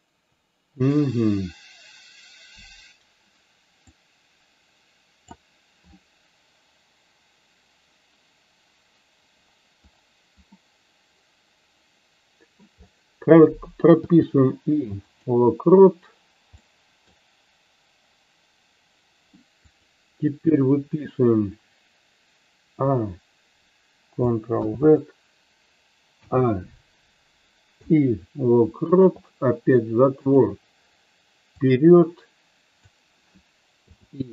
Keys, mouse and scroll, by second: 4.2-5.4 drag, 10.7-12.7 middle drag, 16.7-17.2 middle drag, 19.8 click, 30.3 click, 31.8-33.0 drag.